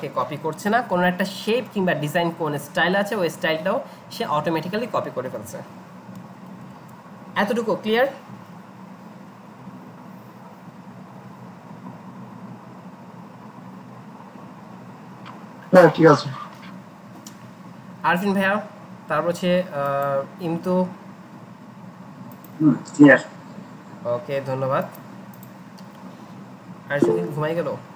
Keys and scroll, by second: 6.7 alt+Tab.